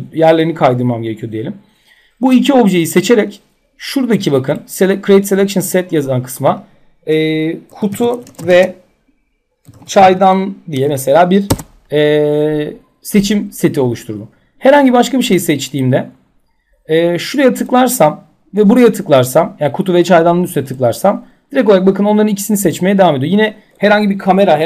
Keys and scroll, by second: 11.1 Return.